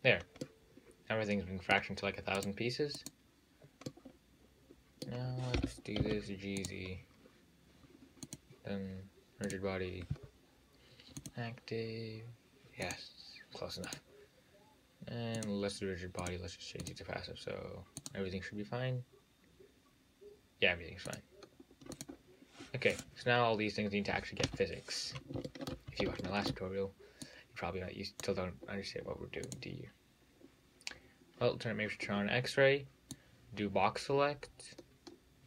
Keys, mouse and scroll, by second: 0.1-0.4 scroll down 4, 0.4 scroll up 2, 0.7-2.6 middle drag, 2.6 click, 3.2 click, 4.1-5.8 middle drag, 5.8 g, 7.1-8.5 scroll down 4, 8.5 click, 9.7 click, 11.4-13.2 drag, 14.1 click, 15.6 click, 16.4-20.7 drag, 21.3 click, 22.2 drag, 23.2 drag, 24.7 `, 25.4-25.8 scroll up 2, 25.8 shift+middle click, 26.2 scroll up 1, 26.5-27.5 shift+middle drag, 27.5 click, 29.7-32.8 drag, 33.4 click.